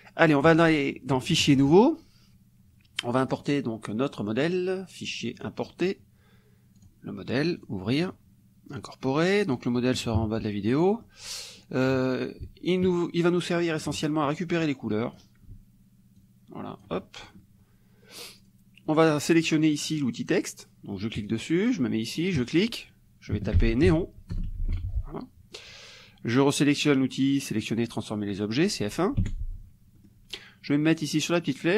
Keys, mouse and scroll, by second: 0.5 click, 1.5 click, 3.4 click, 5.4 click, 6.9 click, 7.6 click, 10.2 KP_Subtract, 10.8 click, 11.6 click, 12.8-14.4 ctrl+drag, 14.6 ctrl+click, 16.2-17.5 ctrl+drag, 17.0-17.5 ctrl+scroll up 1, 18.4 click, 21.2 click, 22.4 click, 23.6 shift+n, 23.9 shift+e, 24.3 shift+BackSpace, 24.7 shift+o, 29.2 F1, 30.1 click.